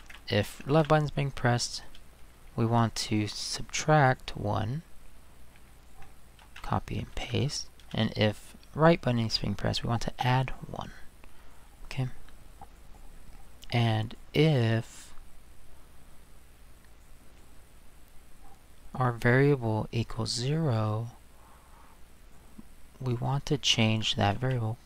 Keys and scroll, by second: 0.0 ctrl+c, 0.7 ctrl+v, 1.9 space, 6.4 ctrl+c, 7.1 ctrl+v, 7.8 space, 24.4 ctrl+c.